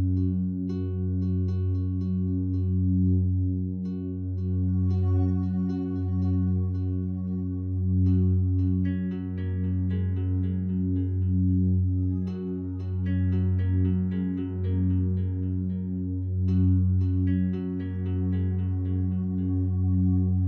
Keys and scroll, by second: 3.7 ctrl+t.